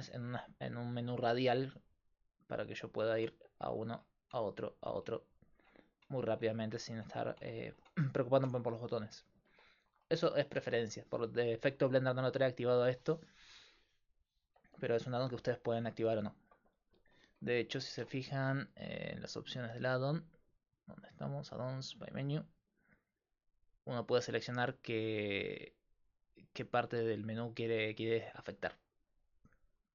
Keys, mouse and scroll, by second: 3.7 Tab, 4.4 Tab, 5.0 Tab, 5.6 Tab, 6.1 Tab, 6.6 Tab, 7.0 Tab, 7.4 Tab, 7.8 Tab, 8.4 Tab, 14.5-16.4 middle drag, 18.4-26.6 drag.